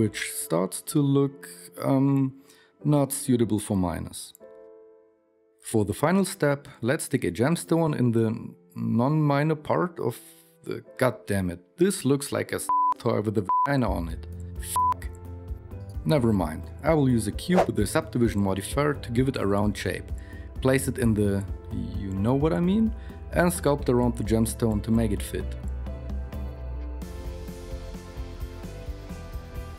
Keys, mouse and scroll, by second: 12.4 shift+KP_1, 12.8 shift+a, 14.8 s, 15.2 s, 20.4-23.8 typing.